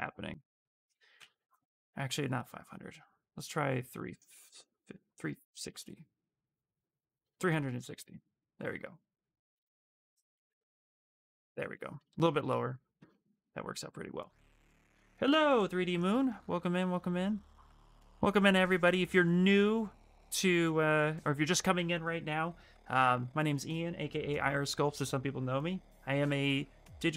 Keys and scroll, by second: 1.1 ctrl+z, 6.9 BackSpace, 11.1 shift+f, 12.1 shift+f.